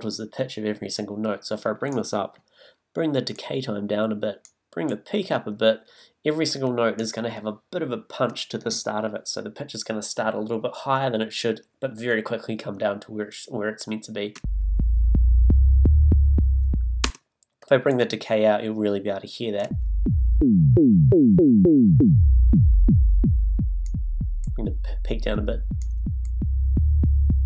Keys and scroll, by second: 14.4 space, 17.0 space, 19.6 space.